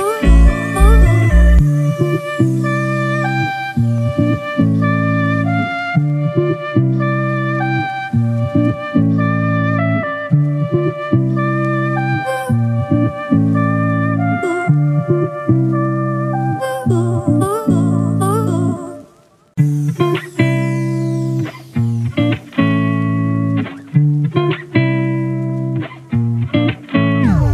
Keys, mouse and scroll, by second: 9.2 alt+click, 14.2 right click, 15.5 double click, 16.6-16.9 typing, 17.3 double click, 20.5 right click, 22.8 double click.